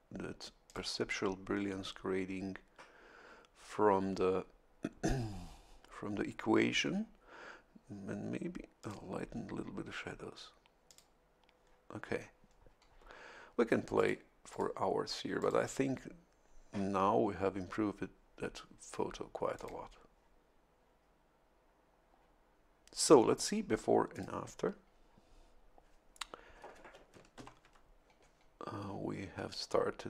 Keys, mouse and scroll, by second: 0.6 click, 8.8 click, 10.8 click, 13.9 click, 14.5 click, 15.4 click, 19.5 click, 24.1 click, 27.3 ctrl+shift+l.